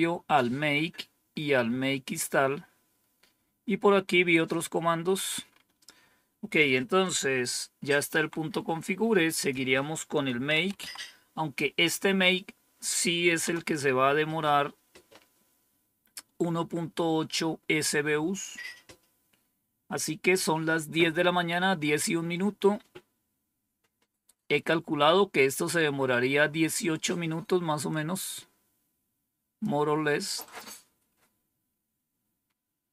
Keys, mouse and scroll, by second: 1.1-2.0 scroll down 3, 2.9-3.9 scroll down 2, 4.1-5.1 scroll down 2, 6.5 click, 8.0 Down, 9.2 click, 9.9-11.2 typing, 13.3 Return, 15.0-17.5 scroll up 1, 17.5 scroll up 1, 27.8-29.5 drag, 30.3 click, 31.0-31.7 scroll down 2.